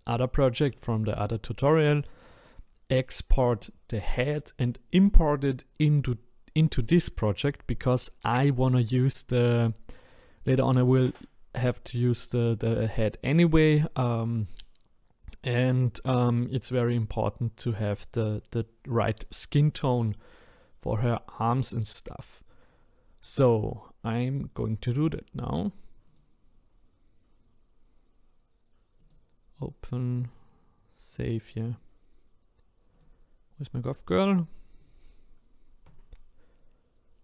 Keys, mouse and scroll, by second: 8.5-9.5 scroll up 1, 9.5-11.8 scroll down 1.